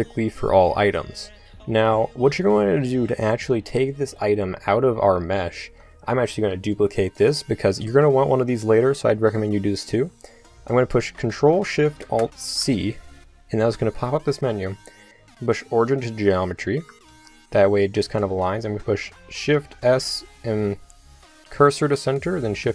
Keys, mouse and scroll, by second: 1.5 Tab, 3.8 click, 5.6 Tab, 6.4 KP_7, 6.8 right click, 12.6 ctrl+alt+shift+c, 17.1 shift+s, 19.5 shift+s, 22.6 shift+s.